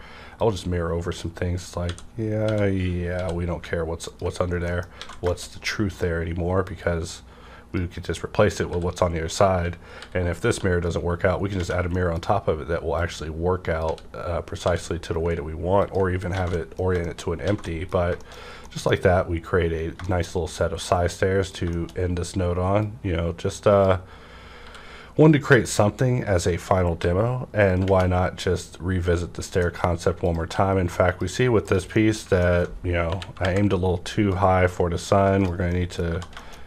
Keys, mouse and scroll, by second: 0.3-4.1 drag, 1.8-3.2 typing, 4.5 scroll down 1, 4.7 middle click, 5.0 alt+a, 5.5 scroll up 1, 5.8 click, 6.6-9.9 drag, 8.6 w, 10.0 b, 11.6 typing, 11.9 middle click, 13.0-15.8 drag, 13.9-14.6 typing, 16.1 scroll down 1, 16.3 alt+a, 16.5 middle click, 17.5 alt+a, 18.2 shift+middle click, 18.3-18.7 shift+scroll down 2, 18.6 middle click, 19.0-20.0 scroll up 1, 20.0 middle click, 20.8 middle click, 21.5 click, 21.9 shift+scroll up 1, 22.7-26.8 drag, 22.7-23.1 scroll up 1, 24.6 w, 27.0 g, 27.0 w, 27.8 _, 29.6 middle click, 30.2 click, 30.2 middle click, 30.4 q, 31.1 click, 31.1 q, 31.6 click, 31.9-33.3 middle drag, 33.0 KP_1, 33.3 KP_5, 34.3-35.7 drag, 35.7 middle click, 36.1-36.6 scroll up 2, 36.4 middle click, 36.4 1.